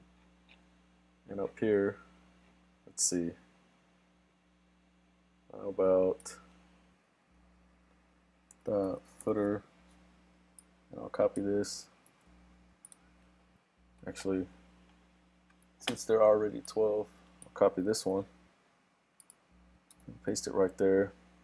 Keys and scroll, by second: 12.1 super+c, 18.0 super+c, 20.1 super+v.